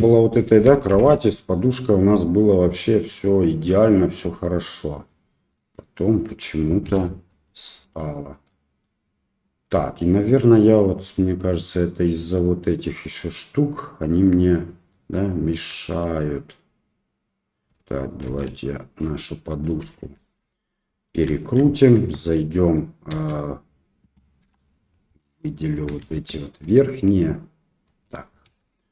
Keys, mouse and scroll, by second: 0.9 shift+Left, 2.7-3.2 middle drag, 3.6 click, 4.2 click, 4.7 middle click, 5.5 click, 6.0 click, 6.9 Delete, 7.3 middle click, 7.9 click, 8.5 middle click, 14.0-14.9 middle drag, 15.7 shift+middle drag, 18.2 KP_1, 20.2 alt+r, 20.7-21.1 middle drag, 21.4 shift+middle click, 21.7 middle drag, 22.0 Tab, 22.5 middle click, 23.1 KP_1, 24.4 1, 26.0 shift+z, 26.3 shift+middle click, 27.1 click, 28.4 Delete.